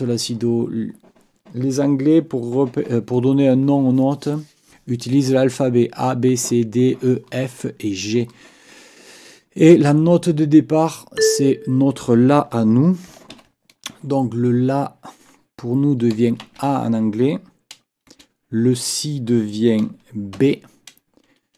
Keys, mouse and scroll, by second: 11.2 click, 13.3 ctrl+l, 16.4 shift+a, 18.1 space, 20.4 shift+b.